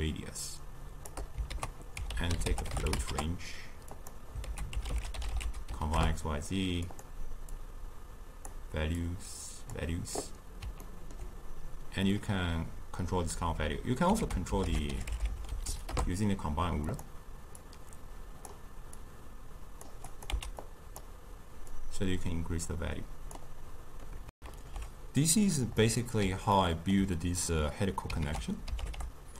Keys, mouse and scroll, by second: 1.6 ctrl+a, 4.5 ctrl+a, 7.6 click, 9.1 drag, 10.9-14.0 ctrl+middle drag, 14.3 ctrl+a, 15.7 Down, 17.6 click, 19.0 drag, 20.1 click, 20.3 x, 20.7 click, 21.8-24.4 drag, 24.4 ctrl+shift+q, 25.8-28.2 middle drag, 28.2 ctrl+a.